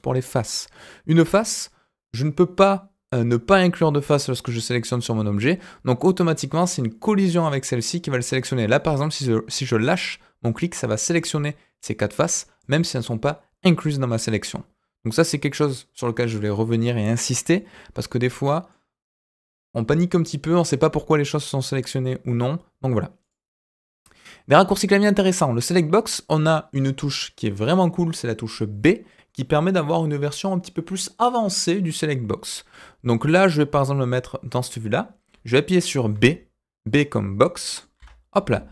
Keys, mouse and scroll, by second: 5.9-13.6 drag, 17.5-18.7 middle drag, 23.2 click, 29.0-32.1 scroll down 2, 32.7-34.6 middle drag, 36.2 typing, 37.7 middle click, 37.9 b.